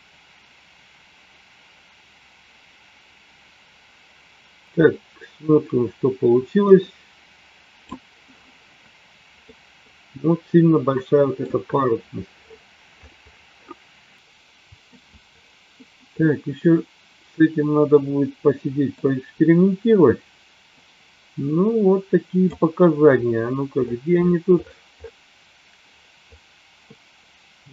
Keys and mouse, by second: 9.4-11.5 middle drag, 14.2 middle click, 17.1-19.5 middle drag, 20.7-23.0 drag.